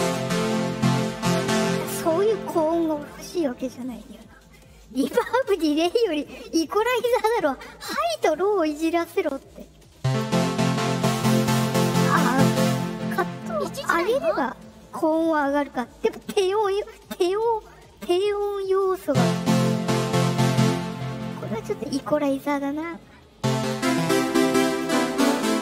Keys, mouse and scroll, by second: 6.4-8.1 drag, 9.2 click, 10.7-11.9 drag, 17.9-18.9 drag, 19.5 click.